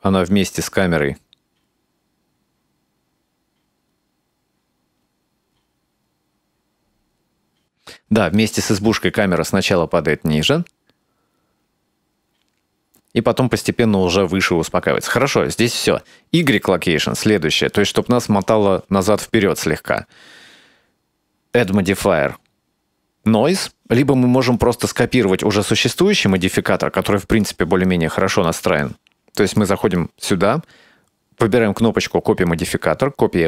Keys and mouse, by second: 16.5 click, 21.6-23.9 drag, 24.6 click, 26.3 click, 27.3 click, 29.5 click.